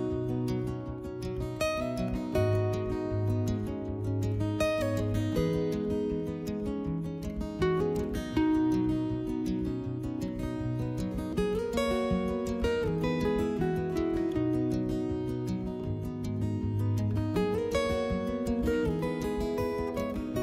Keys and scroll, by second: 2.0 s.